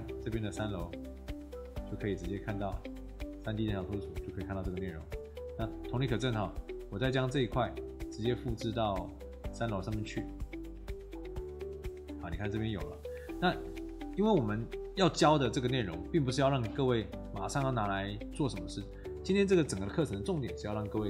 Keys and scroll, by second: 4.3 Escape, 12.5 Escape.